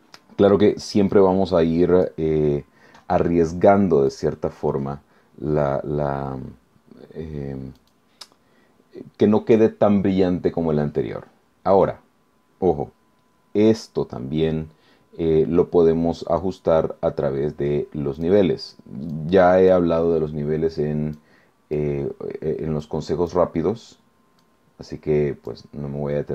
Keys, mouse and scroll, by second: 1.1 click, 4.1 click, 7.8 click, 18.2 click, 19.1-19.9 drag, 21.1-21.9 drag, 22.8-23.5 drag, 24.4-25.7 drag.